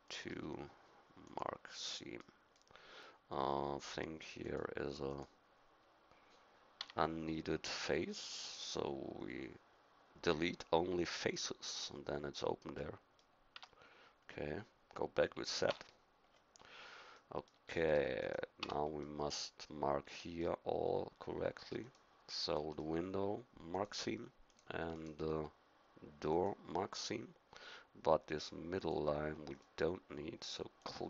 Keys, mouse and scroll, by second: 1.2 right click, 2.2 middle click, 6.8 x, 13.6 Tab, 15.7 z, 18.2-19.4 drag, 18.6 Tab, 19.7 middle click.